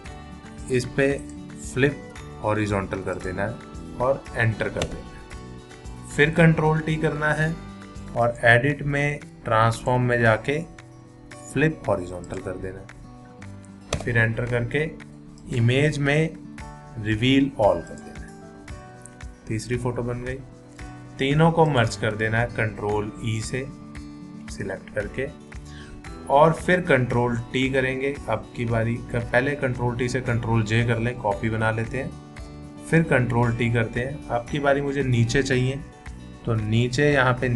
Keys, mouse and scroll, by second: 1.2 right click, 3.1 click, 4.8 Return, 6.6 ctrl+t, 8.2 click, 12.2 click, 14.0 Return, 15.4 click, 17.9 click, 24.0 ctrl+e, 31.5 ctrl+j.